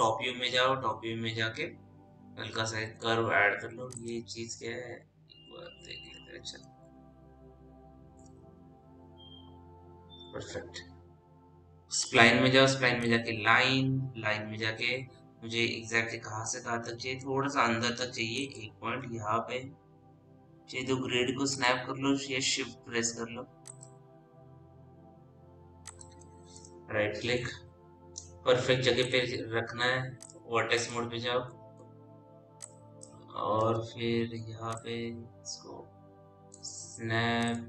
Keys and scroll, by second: 0.1 t, 5.8 p, 8.9 t, 34.0 w.